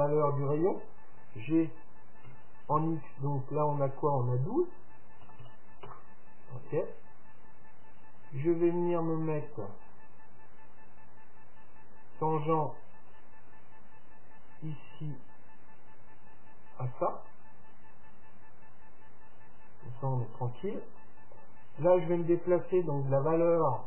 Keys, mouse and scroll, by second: 2.3 g, 8.2 click, 10.4 middle click, 11.1-12.6 middle drag, 12.0 click, 12.9 click, 15.1-17.0 drag.